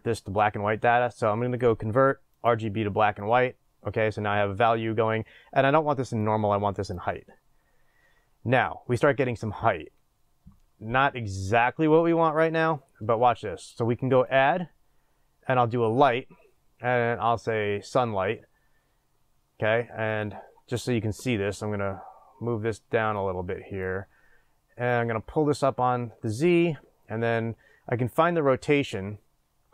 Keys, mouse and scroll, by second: 3.2-3.9 middle drag, 3.2 shift+a, 3.9 click, 6.2 click, 7.0 middle click, 18.0-29.7 drag.